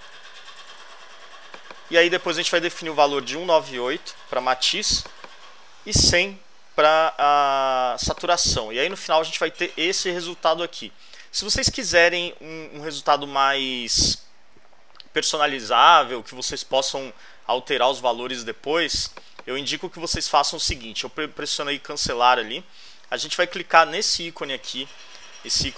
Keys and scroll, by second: 3.0-4.0 typing, 5.5-6.4 typing.